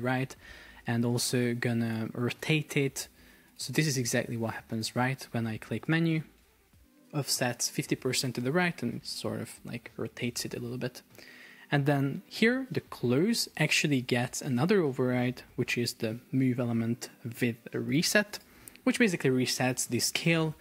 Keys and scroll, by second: 12.9 Escape.